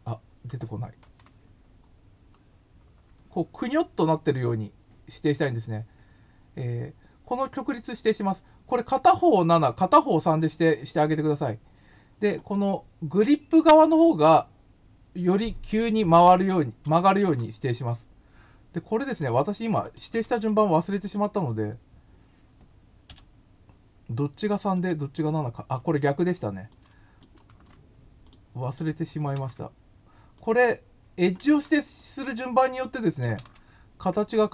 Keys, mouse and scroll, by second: 16.1 click, 17.2 ctrl+c, 19.0 click, 19.1 click, 19.6 click, 19.8 click, 20.2 ctrl+v, 24.7 click, 27.4 ctrl+x, 28.2 click, 28.6 click, 29.3 ctrl+v, 30.3 click, 31.6 ctrl+x, 31.9 click, 32.8 click, 33.3 ctrl+v.